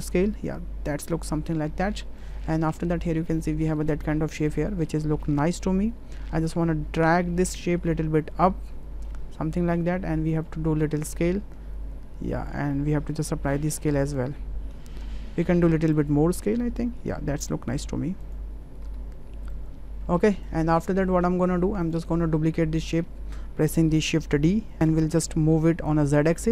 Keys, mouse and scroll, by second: 2.3 click, 3.4 middle drag, 4.4-4.9 middle drag, 6.0 w, 7.0-8.7 drag, 9.1-9.8 middle drag, 11.2-12.5 drag, 13.4 ctrl+a, 16.0-17.1 drag, 17.4 ctrl+a, 18.9 w, 19.6 click, 21.2 middle click, 21.8 click, 24.4 shift+d, 25.5 g.